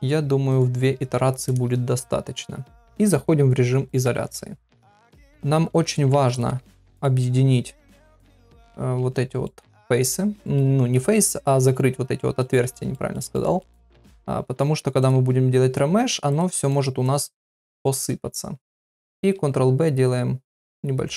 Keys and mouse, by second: 0.5 click, 4.0 KP_Divide, 5.3 middle click, 5.7 Tab, 6.1 2, 7.0 middle click, 8.5 shift+middle click, 9.4 middle click, 10.4 middle click, 11.5 f, 12.2 shift+middle click, 12.9 middle click, 13.3 middle click, 13.8 shift+middle click, 15.0 click, 15.9 z, 16.7 click, 17.2 z, 18.1 f, 19.2 ctrl+b.